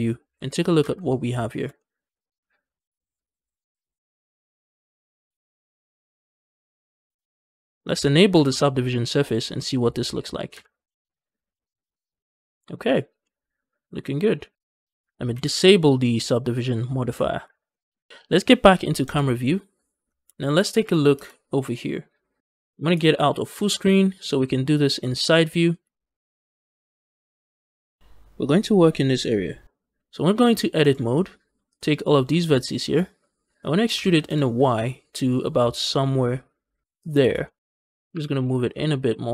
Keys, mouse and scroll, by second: 0.7 ctrl+space, 0.9 middle click, 1.3 shift+middle click, 1.6-3.1 middle drag, 4.1-5.2 middle drag, 5.3 shift+middle click, 5.4-5.8 scroll up 2, 5.8-7.8 middle drag, 7.1 scroll down 1, 8.2 ctrl+space, 9.4 click, 10.4 ctrl+space, 10.6 middle click, 11.3 Tab, 11.4-12.8 middle drag, 12.8 scroll down 1, 13.1-14.5 middle drag, 14.5 ctrl+space, 15.2 ctrl+space, 16.4 click, 17.3 ctrl+space, 17.6 middle click, 17.8-18.2 scroll down 2, 18.9 KP_0, 19.9 scroll down 2, 20.2 shift+middle click, 20.6 shift+middle click, 21.0 z, 23.4 ctrl+space, 24.0 scroll down 2, 24.4 shift+middle click, 24.8 scroll down 2, 25.0 shift+middle click, 25.3-26.2 scroll up 3, 25.6 shift+middle click, 26.5 shift+middle click, 26.8-27.8 scroll up 1, 27.8 scroll down 1, 28.0 shift+middle click, 30.7 Tab, 31.5 click, 32.6 ctrl+click, 33.8 e, 34.1 y, 36.9 shift+click, 37.1 scroll down 1, 37.3 shift+middle click, 38.0 e, 38.2 y.